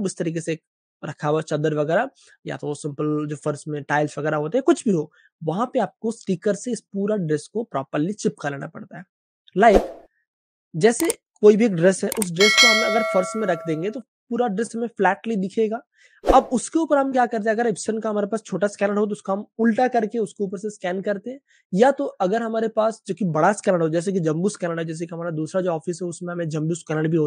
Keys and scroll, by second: 11.0 Page_Up.